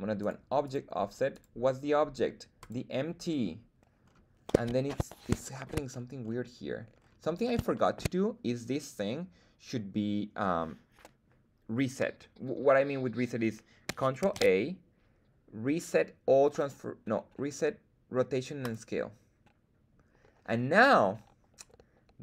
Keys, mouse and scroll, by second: 0.2 click, 0.6 click, 1.3-2.7 drag, 4.0-4.9 scroll up 2, 5.4 shift+middle drag, 5.8-6.4 scroll up 2, 6.9-7.5 scroll down 4, 7.7 shift+middle drag, 14.2 ctrl+a.